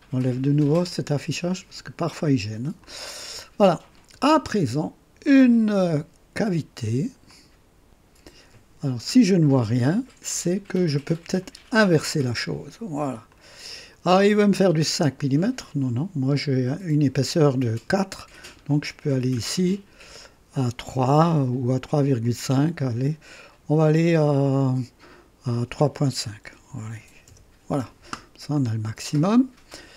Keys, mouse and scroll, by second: 0.7 click, 2.1 click, 2.8-4.1 drag, 7.2 click, 11.4 click, 13.3-15.6 drag, 18.8 scroll down 2, 19.8 scroll down 2, 22.2-24.5 drag, 26.4-27.4 typing, 27.2 KP_Enter, 28.5-29.9 drag.